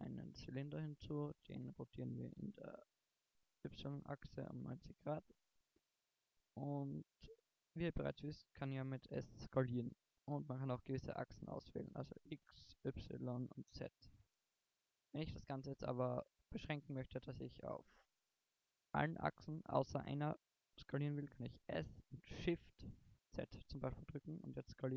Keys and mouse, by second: 1.8 r, 4.2-4.8 middle drag, 6.3-9.3 middle drag, 9.3 s, 14.8-15.2 middle drag, 16.6-21.5 middle drag, 21.5 s.